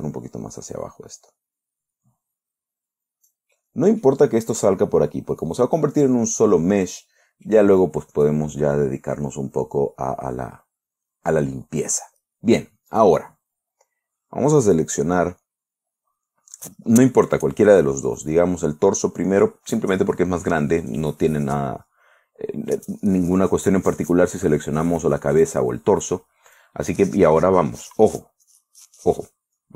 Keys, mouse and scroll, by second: 4.0 right click, 5.3 right click, 5.7 scroll down 1, 9.3-9.7 scroll up 1, 9.7-10.3 scroll down 4, 13.4 right click, 18.7 right click, 21.3 click, 27.0 click.